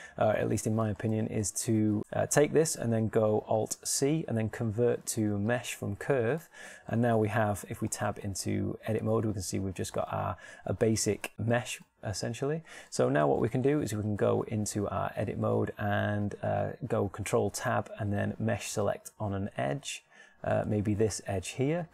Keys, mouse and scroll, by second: 0.0 right click, 0.8 shift+right click, 1.8 shift+right click, 4.5 alt+c, 8.3 shift+Tab, 16.2 ctrl+Tab.